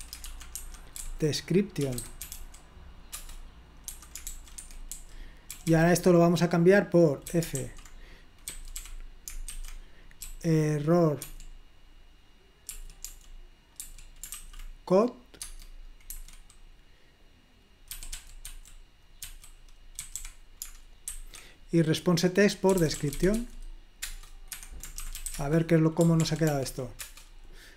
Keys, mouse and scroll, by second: 0.0-0.3 typing, 1.6-2.9 typing, 3.2 Return, 4.2-5.6 typing, 4.6 Escape, 7.1-11.3 typing, 12.5-14.9 typing, 15.5 Tab, 16.2 Escape, 17.9-21.1 typing, 22.5-25.8 typing, 24.0 Return, 24.5 Escape, 26.3 ctrl+p, 26.5 ctrl+p, 27.0 Return.